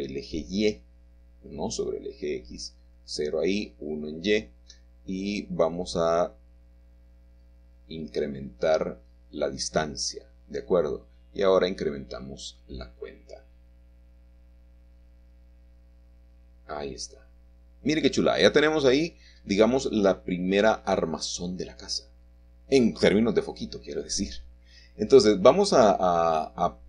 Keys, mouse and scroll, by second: 0.0-1.2 scroll down 2, 1.2 scroll up 2, 3.1 click, 7.4-10.2 drag, 12.1 click, 17.3-19.2 middle drag, 19.2-20.0 scroll down 1, 20.4 middle click, 22.1-23.2 drag.